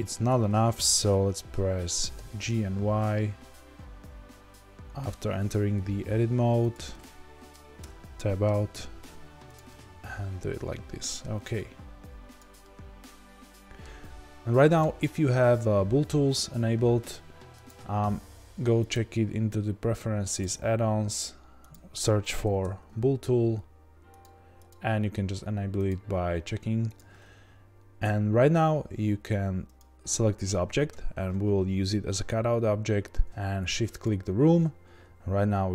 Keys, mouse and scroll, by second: 0.2 Tab, 2.2 g, 7.8 Tab, 8.5 g, 9.5 click, 9.6-19.0 middle drag, 11.5 g, 19.0-29.7 drag, 34.0 shift+click.